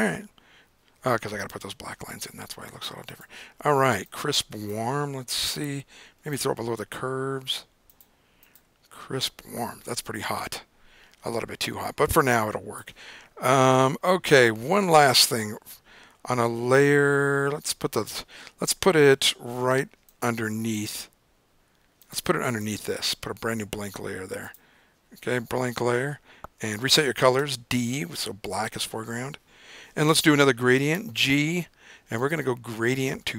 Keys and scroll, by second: 27.6 d, 31.1 g.